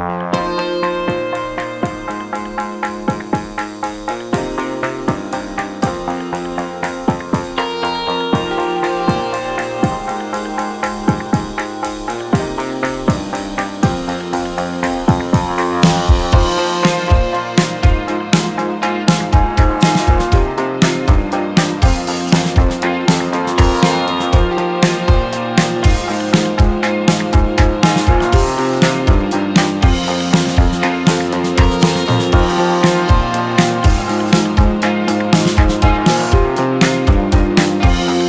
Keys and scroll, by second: 4.4-6.3 typing, 4.8 Return, 7.6 Return, 7.8-8.7 typing, 9.3 Return, 13.6 e, 23.4 0, 24.0 Return, 32.0 Delete.